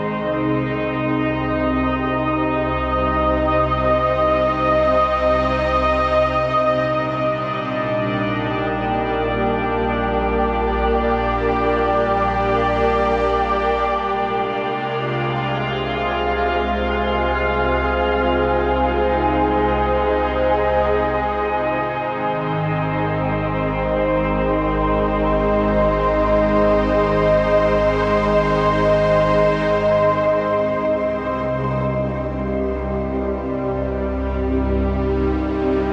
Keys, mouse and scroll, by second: 1.8-5.0 typing, 2.7 click, 3.0 click, 3.9 click, 4.4 click, 4.7 click, 7.1 typing, 9.2 scroll down 1, 9.7-13.9 typing, 10.1 click, 10.4 click, 10.8 click, 11.1 click, 11.4 click, 12.5 click, 13.0 click, 13.4 click, 13.8 click, 15.7 right click, 16.9 click, 18.2-22.1 shift+drag, 22.1-23.2 typing, 22.4 click, 23.1 click, 23.4-26.5 drag, 26.5-28.1 shift+drag, 28.1-29.6 drag, 29.6-31.8 alt+drag, 31.8 ctrl+d, 34.4 click, 35.6 Up.